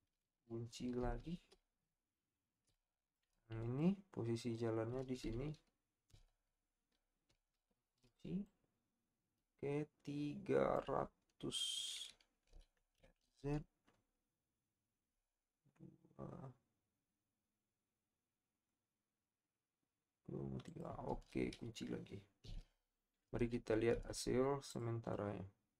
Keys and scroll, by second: 1.0 i, 12.7 r, 13.0 z, 22.4 i.